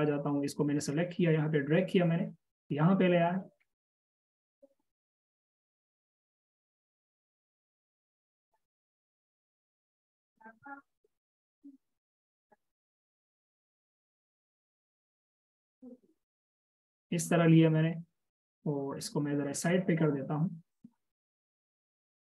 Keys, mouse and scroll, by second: 3.9-6.6 scroll down 1, 9.4-10.1 alt+shift+scroll down 1, 10.6 alt+shift+click, 21.9 alt+c.